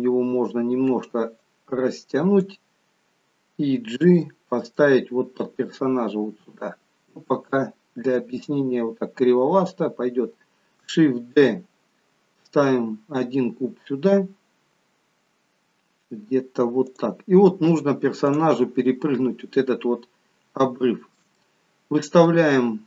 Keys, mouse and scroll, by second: 4.0 g, 9.2-10.8 scroll down 2, 11.5 shift+d, 18.1 click, 20.6 shift+middle click, 21.4 middle click.